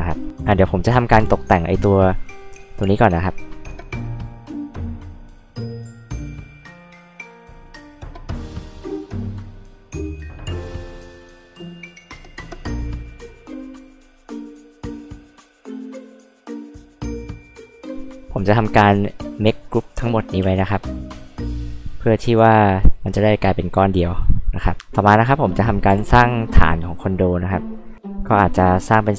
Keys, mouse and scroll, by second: 3.2 click, 4.6 space, 4.9 click, 5.0 click, 5.0 click, 5.4 click, 5.7 b, 5.8 click, 6.3 space, 6.4 click, 6.8 click, 7.1 click, 7.4 click, 7.5 b, 7.7 click, 7.9 space, 8.0 click, 8.3 click, 9.0 click, 9.1 click, 9.3 click, 9.4 click, 9.6 click, 9.8 click, 10.1 click, 10.3 click, 12.1 click, 12.6 click, 12.9 space, 13.0 click, 14.3 click, 14.4 click, 14.6 click, 15.1 click, 15.2 click, 15.7-17.7 typing, 16.7 click, 17.5 click, 18.5 click, 20.4 space, 20.6 click, 22.3 right click, 23.5 click, 24.3 click, 25.9 h, 25.9 click.